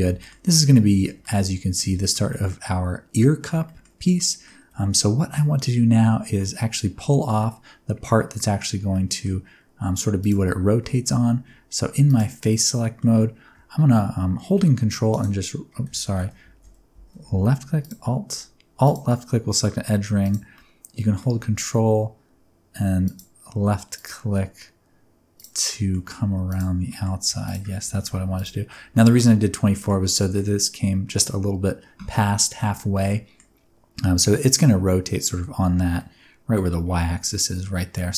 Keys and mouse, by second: 0.1 shift+middle click, 0.4-1.0 middle drag, 1.2 ctrl+middle click, 1.9 shift+middle drag, 2.2-3.3 middle drag, 3.6 shift+middle drag, 4.1 middle drag, 4.6 Tab, 4.9 middle click, 7.3-8.3 middle drag, 8.8 middle click, 10.8 3, 12.5 middle click, 16.0 ctrl+z, 18.8 alt+click, 20.2 click, 20.5 middle click, 25.8 middle click, 26.9 middle click, 27.9 shift+middle click, 28.3 ctrl+click, 28.8-29.9 middle drag, 30.2 middle click, 32.9 middle click, 35.9 middle click.